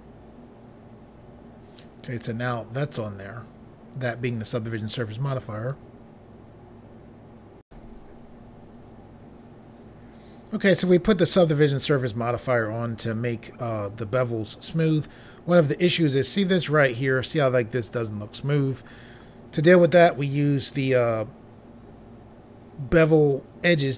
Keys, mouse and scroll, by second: 7.6 Pause.